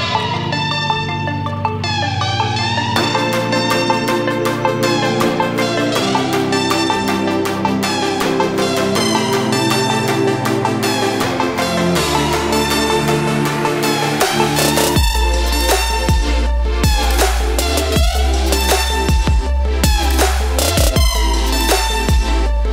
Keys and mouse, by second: 2.0 click, 5.4 click, 8.0 click, 9.4-10.5 typing, 10.7 Return, 15.3 click, 16.0 Down, 20.9 click.